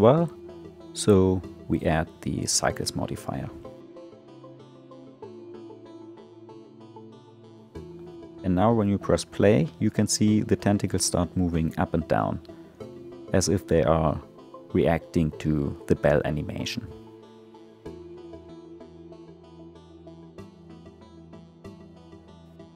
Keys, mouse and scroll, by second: 0.6-2.7 drag, 2.7-3.2 scroll down 2, 3.7-6.4 drag, 7.2-9.2 drag, 9.2 middle click, 9.9 space, 18.7 space, 20.7-21.6 middle drag, 21.6-22.7 scroll up 7.